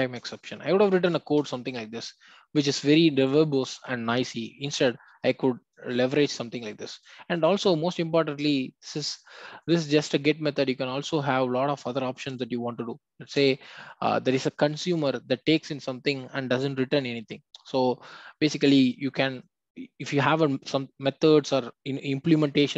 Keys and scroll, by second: 0.1 Return, 13.3 ctrl+space.